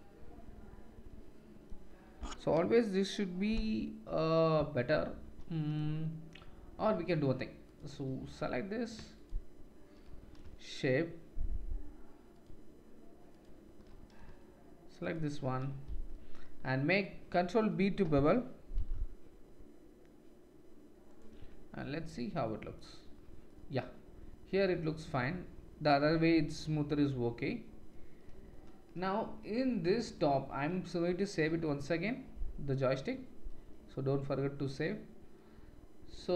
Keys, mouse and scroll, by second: 7.7 click, 8.2 alt+click, 9.0 alt+shift+middle click, 9.1 alt+shift+click, 9.3 alt+shift+middle click, 12.3 alt+shift+click, 13.3 alt+shift+click, 15.0 alt+shift+click, 18.7 ctrl+b, 21.4 Tab, 27.3-29.0 drag, 29.0-36.3 shift+middle drag, 30.5 ctrl+s.